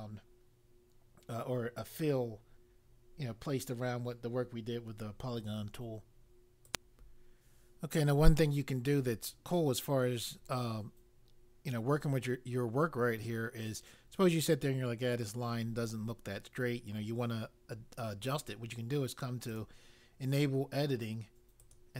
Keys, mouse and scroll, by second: 6.6 click, 19.5 click, 21.5 click.